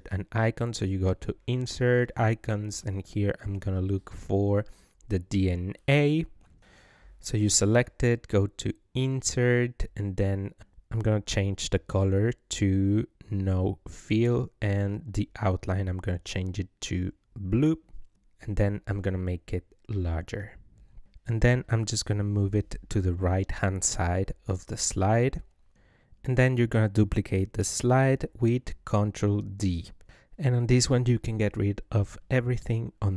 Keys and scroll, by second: 3.3-4.5 typing, 28.5 ctrl+d, 30.0 ctrl+v, 32.1 Left.